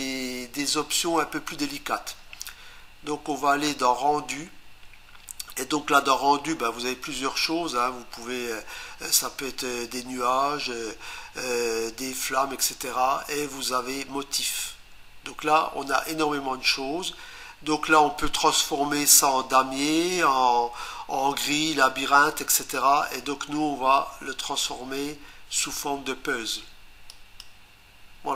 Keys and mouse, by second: 27.1 click.